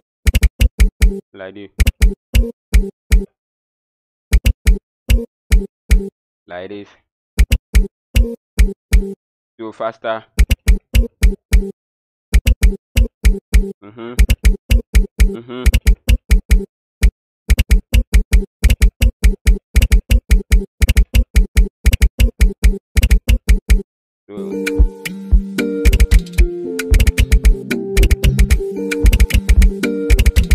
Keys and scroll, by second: 0.0-24.4 typing, 25.8-30.5 typing.